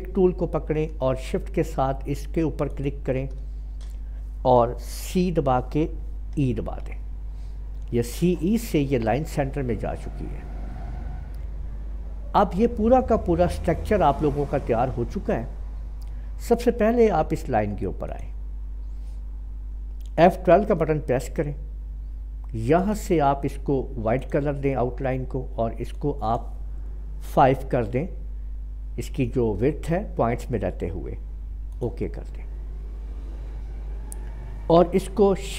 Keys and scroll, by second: 5.2 typing, 6.3 typing, 20.7 F12, 27.3 5.